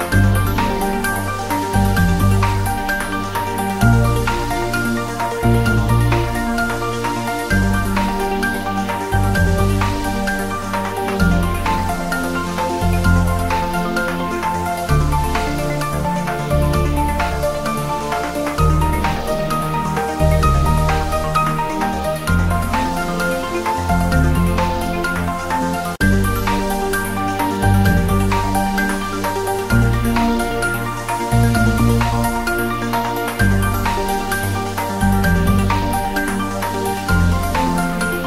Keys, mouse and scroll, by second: 2.7-3.0 scroll down 1, 3.0 scroll up 1, 8.1-9.0 typing, 8.8 click, 10.0 click, 10.2 s, 10.7 click, 11.1 s, 12.5 click, 13.7 shift+z, 14.3 shift+z, 14.6 click, 15.7 scroll up 1, 15.9 click, 16.2 s, 16.7 click, 16.9 scroll up 1, 17.0 Tab, 17.5 click, 18.9 ctrl+b, 19.6-20.2 scroll up 1, 20.2 click, 20.4 Tab, 20.6 scroll down 1, 21.2-24.0 drag, 24.0-24.4 scroll down 1, 26.0 click, 26.4 scroll down 1, 27.9 scroll up 1, 28.8-29.2 scroll up 1, 35.1 click.